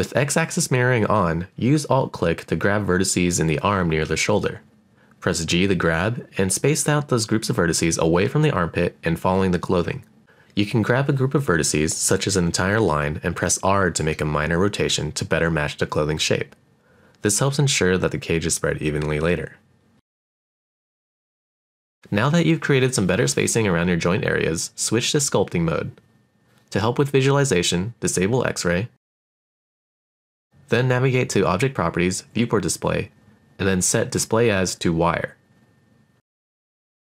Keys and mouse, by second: 0.2 alt+shift+click, 0.3 g, 0.7 click, 1.4 alt+click, 1.8 alt+click, 1.9 g, 2.3 right click, 2.7 alt+click, 3.0 alt+shift+click, 3.9 g, 4.9 click, 5.2 alt+click, 5.3-11.0 typing, 5.7 click, 6.1 click, 6.4 click, 7.1 click, 7.5 click, 7.7 click, 8.1 click, 8.9 click, 9.6 click, 9.9 click, 10.1 alt+click, 11.0 click, 11.4 click, 12.1 g, 12.3 click, 12.7 g, 12.8 click, 13.0 alt+click, 13.5 click, 13.8 click, 13.9 alt+click, 14.0 g, 14.2 click, 14.4 click, 14.5 g, 14.9 click, 15.1 click, 15.4 click, 15.8 click, 15.9 g, 16.2 click, 16.3 alt+click, 16.5 g, 16.7 click, 16.8 alt+click, 17.2 click, 17.4 click, 17.5 g, 17.7 right click, 18.4 g, 18.7 click, 19.4 middle click, 21.1 click, 21.2 g, 21.5 click, 21.6 middle click, 21.9 shift+middle click, 22.4 middle click, 22.8 shift+middle click, 22.9 middle click, 23.1 shift+middle click, 23.4 middle click, 25.5 click, 30.0 click, 32.8 click, 34.5-35.7 drag, 36.2 middle click.